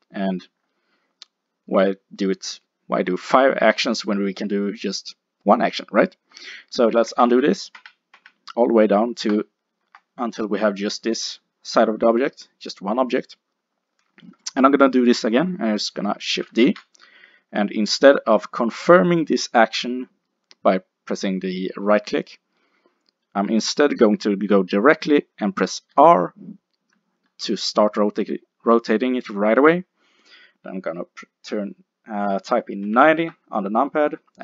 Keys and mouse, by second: 0.6-7.0 middle drag, 7.1 ctrl+z, 7.3 ctrl+z, 7.8 ctrl+z, 8.2 ctrl+z, 9.9 g, 12.3-14.1 drag, 16.7 shift+d.